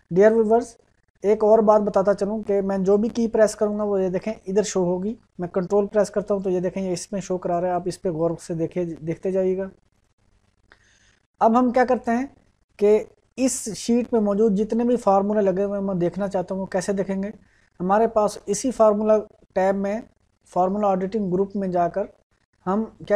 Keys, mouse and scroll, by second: 0.5 click, 3.7 click, 9.9 click.